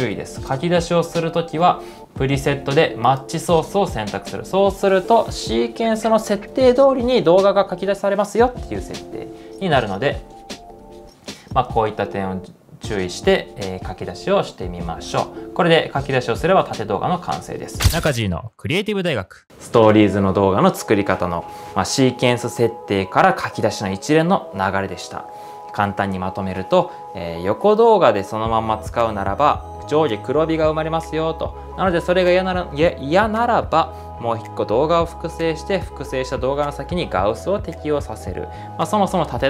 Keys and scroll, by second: 0.0-0.2 typing, 16.7-17.6 typing.